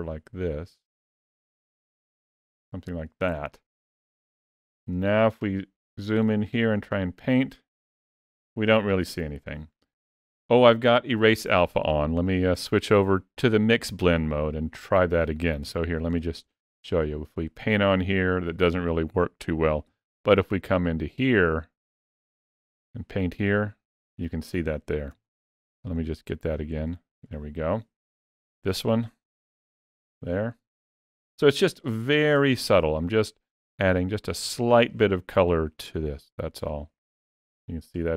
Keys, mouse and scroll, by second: 4.8 ctrl+middle click, 6.7 click, 10.3 ctrl+middle click, 11.6 click, 15.4 f, 16.4 click, 19.7 f, 22.5 click, 25.0 ctrl+z, 25.8 click, 28.5 click, 30.7 shift+middle click, 32.7 shift+middle click, 33.7 ctrl+middle click, 34.4 shift+middle click, 36.0 click.